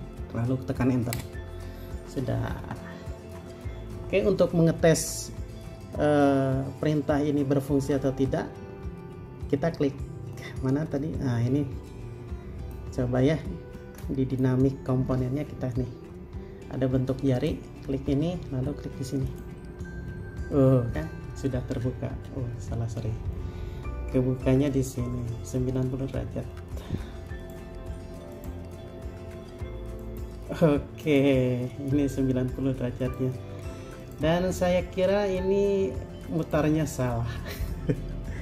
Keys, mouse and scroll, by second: 1.3 Return, 22.7 middle click, 23.9 scroll down 1, 24.4 middle click, 26.9 scroll up 1.